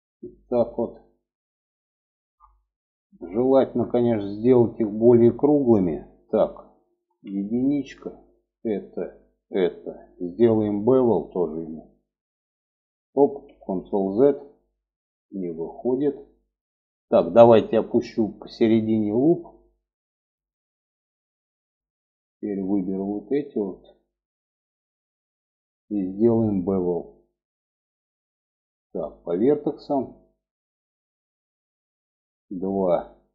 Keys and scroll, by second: 6.4 1, 12.9 ctrl+z.